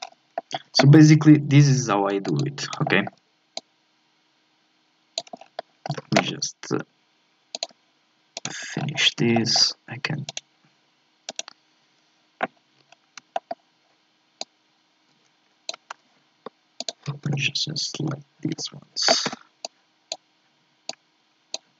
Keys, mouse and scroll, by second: 0.0 scroll up 1, 0.4 shift+middle click, 1.2 e, 2.8 shift+middle click, 3.6-5.4 drag, 5.4 scroll up 4, 5.6-6.8 shift+middle drag, 6.8 e, 8.3 right click, 8.7-9.3 scroll up 4, 9.3 shift+middle click, 10.3-12.5 right drag, 12.5 scroll up 2, 12.9-13.3 scroll down 2, 13.3-14.4 shift+middle drag, 14.4-17.3 drag, 17.3 a, 17.9 a, 19.3 b, 20.9-21.7 drag.